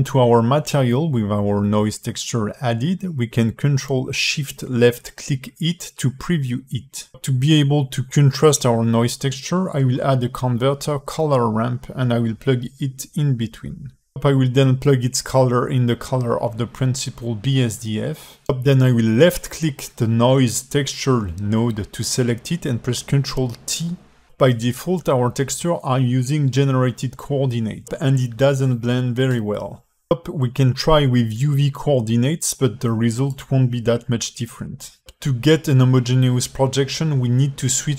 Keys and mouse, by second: 0.0 shift+a, 7.6 ctrl+shift+click, 9.0 shift+a, 14.7-16.7 drag, 17.3 alt+shift+middle click, 20.0 click, 22.0 ctrl+t, 22.6 alt+shift+middle click, 23.2 g, 32.3-33.0 drag, 34.9 alt+middle click, 35.6 alt+shift+middle click.